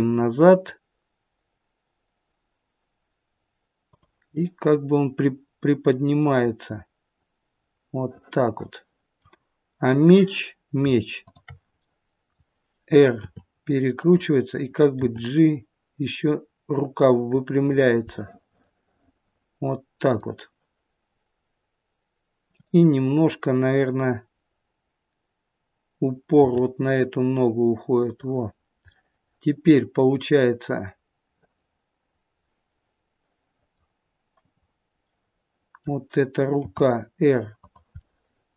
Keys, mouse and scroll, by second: 4.2 middle click, 9.9 click, 11.1 shift+click, 11.7 middle click, 13.1 r, 14.9 g, 18.2 middle click, 22.4 click, 26.3 g, 28.9 middle click, 34.3 click, 35.0 middle click, 36.6 r, 37.9 middle click.